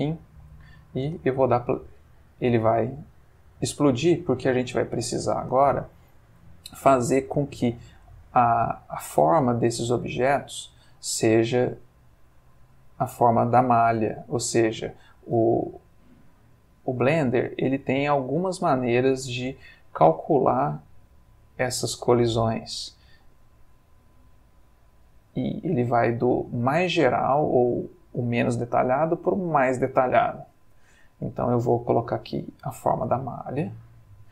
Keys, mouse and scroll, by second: 1.0 space, 3.3 Escape, 5.0 click, 7.2 click, 12.1 click, 13.3 click, 14.5 click, 15.5 click, 16.4 click, 17.4 click, 19.1 click, 20.5 click, 21.8 click, 22.9 click, 24.4 click, 25.3-31.1 drag, 32.0 click, 33.3 click, 34.2 click.